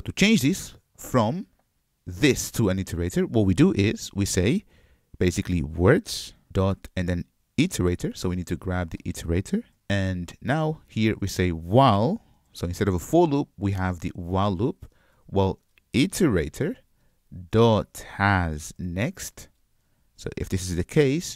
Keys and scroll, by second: 6.5 Return, 9.9 alt+super+v, 13.2 Return.